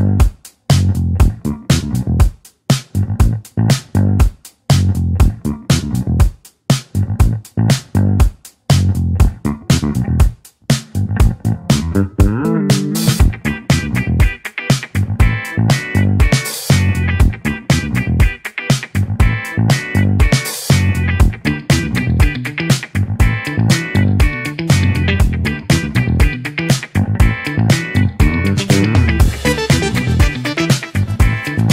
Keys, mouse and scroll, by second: 0.5 click, 1.8-3.1 middle drag, 3.1-3.9 scroll up 2, 3.9-5.8 drag, 31.5-31.7 drag.